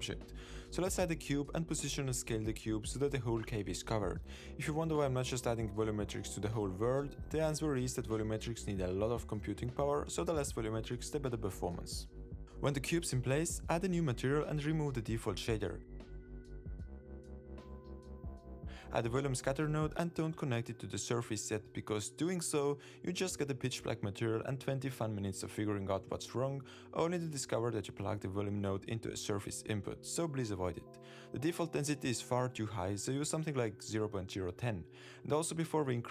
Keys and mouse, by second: 0.0 z, 0.5 super+s, 1.1 shift+a, 5.5 s, 5.8 drag, 6.1 middle click, 6.9 alt+z, 7.3-7.9 middle drag, 8.0 Tab, 8.2 click, 8.8 3, 9.1 middle click, 9.3 click, 9.5 middle click, 9.8 middle click, 10.1 g, 11.1 middle click, 11.6 Tab, 11.8 middle drag, 12.3 alt+z, 12.5 middle click, 13.1 click, 13.7 click, 15.1 n, 16.0 click, 16.5 click, 17.6 click, 18.1-19.1 drag, 19.1 x, 19.4 shift+a, 23.4-24.4 drag, 27.5 super+s, 29.0 z, 33.4-36.1 drag.